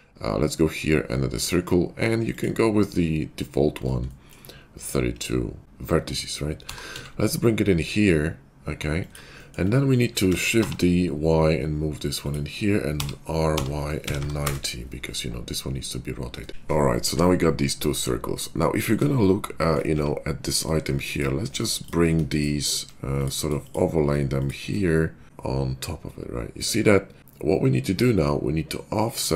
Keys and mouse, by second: 6.6 g, 10.2 shift+d, 12.9 r, 16.5-21.0 middle drag, 21.0 click, 21.1-22.2 shift+middle drag, 22.2 shift+click, 22.3 shift+middle click, 23.0 click, 23.2 middle click, 23.6 shift+click, 24.3 click, 24.6 shift+click, 25.2 g.